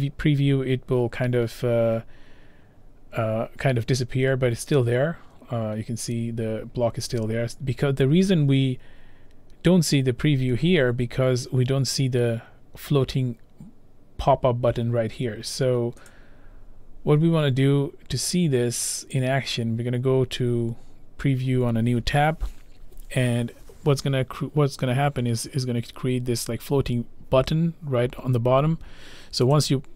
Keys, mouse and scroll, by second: 16.1 click, 18.4 click, 19.2 click, 28.1-28.7 scroll, 29.7 click.